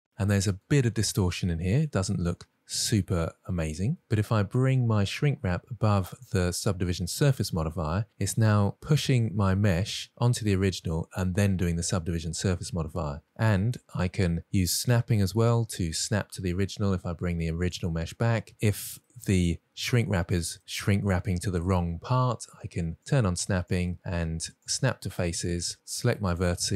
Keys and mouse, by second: 0.9 Tab, 1.6-2.5 middle drag, 2.6 Tab, 3.1 Tab, 3.3-4.0 middle drag, 6.2-7.5 drag, 9.1-9.7 middle drag, 10.1 middle click, 11.7-12.4 middle drag, 14.2 Tab, 14.8 shift+middle drag, 15.9 middle click, 18.1 click, 19.7-20.1 middle drag, 21.2 middle click, 24.0 click, 24.3-25.6 drag, 26.4 middle drag.